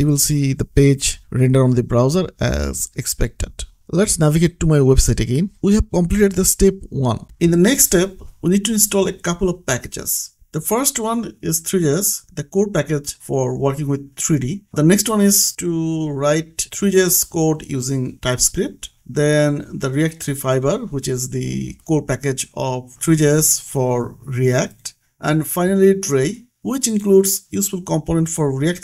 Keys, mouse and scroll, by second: 0.4 click, 3.1 click, 5.8-7.0 scroll down 1, 7.2-7.8 scroll down 1, 7.8-9.4 scroll up 1, 9.4 click, 12.1 click, 15.4 click, 17.4 click, 19.6 click, 24.0 click, 26.6 click, 28.4 right click.